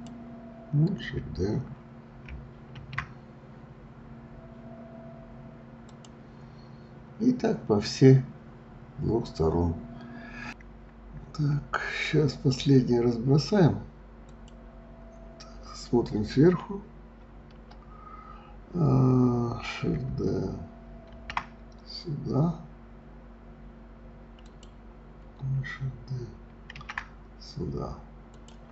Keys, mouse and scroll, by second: 2.7 shift+d, 8.5 scroll down 2, 10.1 scroll down 1, 11.1-11.4 scroll up 3, 14.3 click, 17.5 KP_7, 21.1 shift+d, 26.7 shift+d.